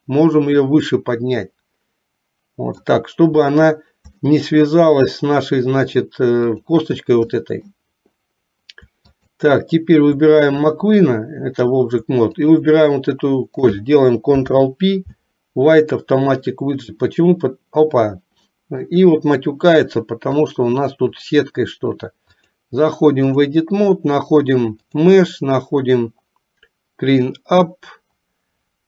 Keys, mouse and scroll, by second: 4.4 shift+middle click, 5.9 click, 7.4 middle click, 9.1 shift+click, 14.4 ctrl+p, 18.6 middle click, 20.6 click, 22.5-23.8 drag, 24.9-28.8 drag.